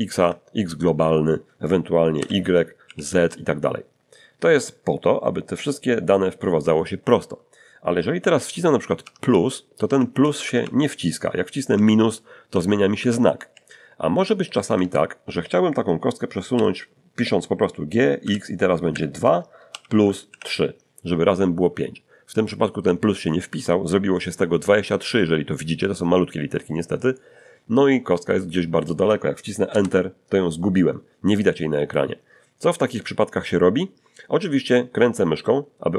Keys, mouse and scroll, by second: 0.2 x, 2.2 y, 2.8 z, 9.0 shift+=, 9.8 shift+=, 10.1 shift+=, 11.7 shift+-, 12.6 shift+-, 14.8 Return, 16.5 g, 18.2 x, 18.9 2, 19.7 shift+=, 20.3 shift+3, 29.7 Return, 35.2-35.9 scroll down 2.